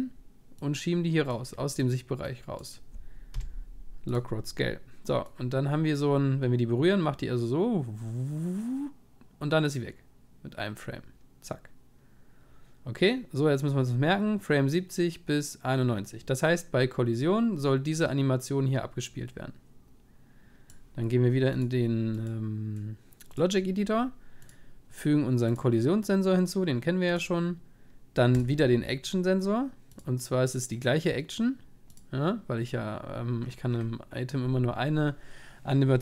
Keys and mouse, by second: 0.7-4.1 drag, 2.2 middle click, 4.1 i, 5.6 click, 22.1-29.6 drag, 30.7-33.3 drag, 34.9-36.0 middle drag.